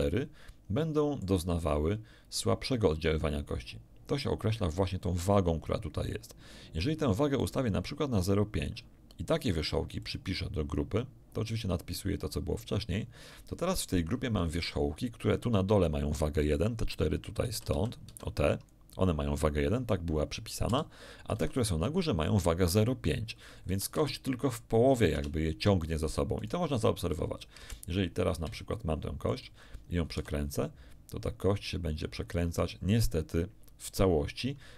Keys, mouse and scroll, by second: 7.4-8.8 drag, 10.0 click, 14.5 z, 17.4 z, 17.7 a, 18.0 b, 18.2 click, 20.6 a, 21.3 b, 21.5 click, 23.6 a, 23.9 z, 25.1 Tab, 26.3 right click, 27.5 1, 28.7 shift+middle click, 30.1 r.